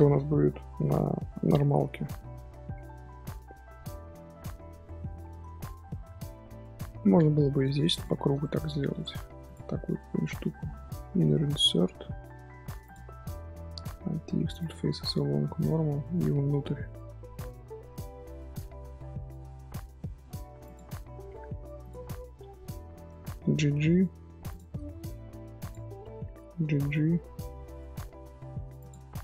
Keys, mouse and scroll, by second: 1.5 scroll down 2, 1.6-2.4 middle drag, 2.4-2.9 scroll down 3, 2.9-4.1 middle drag, 4.1-4.7 scroll down 1, 4.7-5.1 scroll down 1, 5.1-5.5 shift+middle drag, 5.5 scroll down 1, 5.8-6.6 shift+middle drag, 6.6 scroll down 1, 6.7-7.9 scroll up 2, 7.9 click, 8.4 shift+middle drag, 8.6 scroll up 1, 8.9 3, 9.4 alt+click, 9.8 scroll up 1, 13.0 middle click, 13.3-13.6 scroll up 1, 14.0 alt+e, 21.8 alt+click, 22.0-22.9 middle drag, 22.9-23.3 scroll up 1, 23.3 g, 24.7 middle click, 25.6 alt+click, 26.4 g, 28.9 Tab.